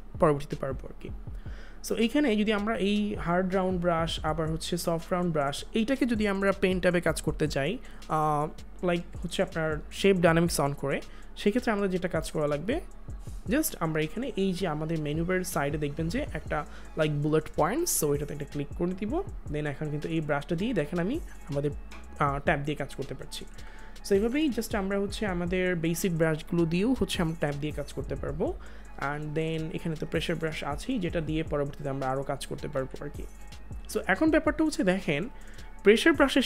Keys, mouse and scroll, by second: 2.9 click, 18.7 click, 22.6 click, 23.0 ctrl+z, 25.0 click, 29.3 click, 32.7 ctrl+z, 33.7 click, 36.0 click.